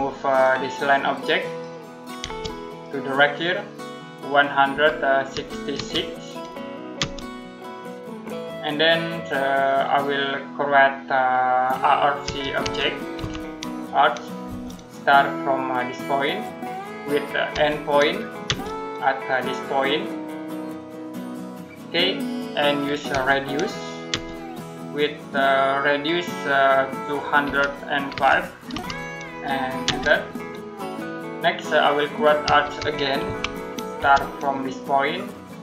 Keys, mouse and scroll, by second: 0.1 click, 2.0 space, 2.5 click, 4.6-5.6 typing, 6.8 space, 12.1-13.0 typing, 14.3 space, 16.0 click, 17.4 e, 18.3 space, 21.1 click, 23.9 space, 27.3-28.5 typing, 29.7 space, 32.0-33.8 typing, 35.0 click.